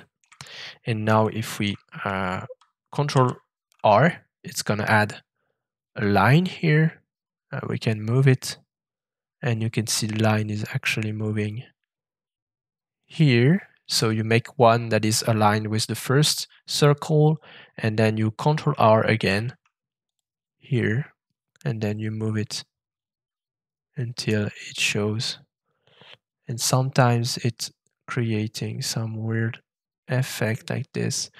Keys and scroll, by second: 3.1 ctrl+shift+r, 19.2 ctrl+r.